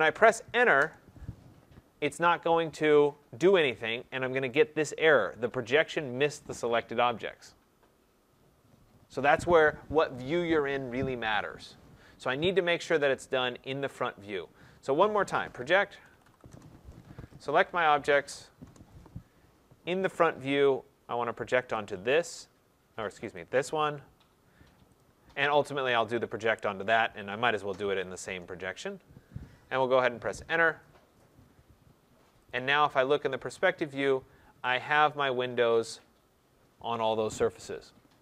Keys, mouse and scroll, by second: 0.7 Return, 15.8-16.4 typing, 17.5 click, 18.5 Return, 20.1 click, 21.7 click, 23.3 click, 24.9 ctrl+click, 28.0 shift+click, 32.4 click, 32.6 click, 33.7 click, 34.0-34.3 scroll.